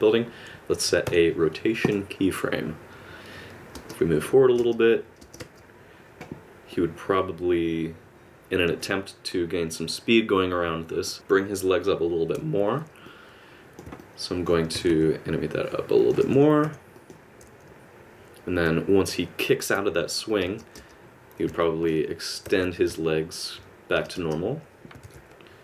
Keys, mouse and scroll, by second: 3.7 space, 4.6 space, 6.7 click, 13.0 click, 14.0 middle click, 14.6 r, 16.6 i, 20.4 space, 21.4 alt+space, 21.6 middle click, 22.4 alt+r, 23.9 space, 24.1 space, 25.0 alt+r.